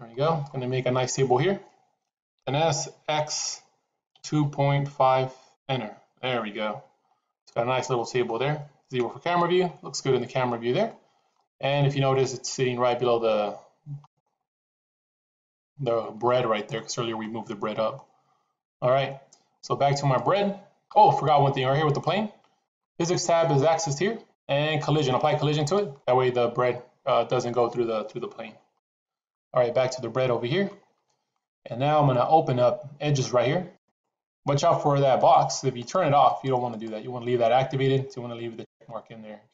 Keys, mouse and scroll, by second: 2.2 s, 7.2-8.1 middle drag, 8.8 KP_0, 10.7-11.2 middle drag, 11.6-14.1 middle drag, 14.1 scroll down 1, 14.6-16.6 middle drag, 17.1-17.8 middle drag, 17.8 scroll down 1, 20.1 click, 21.1 click, 25.6 click, 28.6 click, 33.7 click, 35.7 click, 36.2 click, 36.7 click.